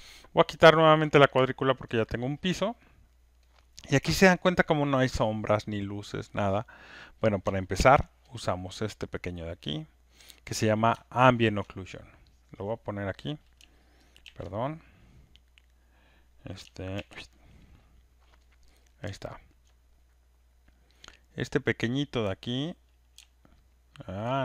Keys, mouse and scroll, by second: 0.9 click, 1.7 alt+right click, 2.9 alt+click, 3.3 alt+right click, 4.8 alt+click, 7.7 ctrl+F1, 8.3 click, 10.1 ctrl+click, 11.6 click, 12.7 click, 14.2 ctrl+F1, 16.9 ctrl+F1, 17.9 middle click, 19.4 click, 19.6-20.9 scroll, 22.2 click, 24.2 click.